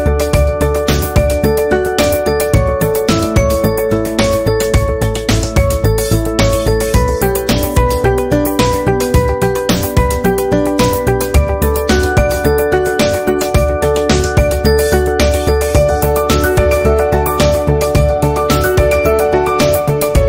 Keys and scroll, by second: 8.8 v, 12.0 a.